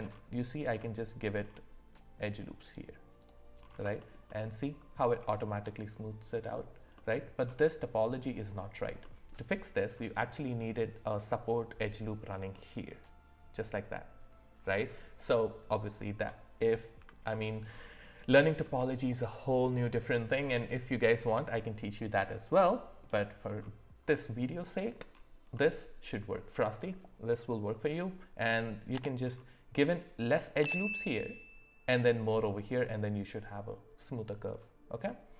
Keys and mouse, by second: 6.9 middle click, 9.0 middle click, 17.0 Tab, 18.1 click, 22.6 middle click, 25.5-27.9 middle drag, 35.0 middle click.